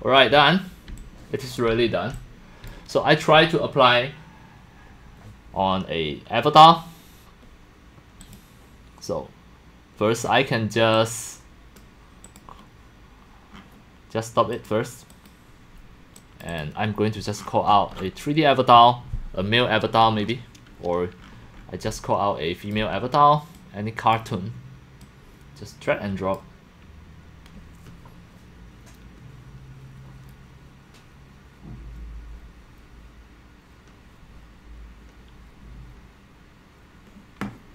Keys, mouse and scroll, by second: 0.0-0.7 scroll, 0.9-2.6 typing, 1.0 click, 2.1-7.4 drag, 8.2 click, 9.1-10.2 drag, 10.2-10.8 middle drag, 10.2 scroll, 10.8-11.4 scroll down 9, 10.9 click, 10.9 middle click, 12.3 click, 13.5-14.4 scroll down 7, 14.4 scroll, 14.5 click, 15.1 click, 16.4 click, 16.6 click, 17.4-18.1 scroll, 20.1-21.2 scroll down 16, 21.2 click, 21.9-22.7 x, 22.8 click, 23.6-24.1 drag, 25.0 click, 25.4-26.4 drag.